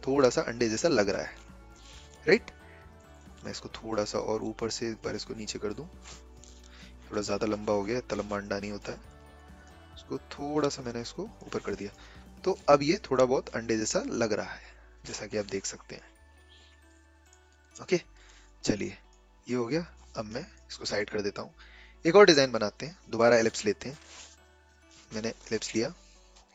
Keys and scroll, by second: 6.4 ctrl+z.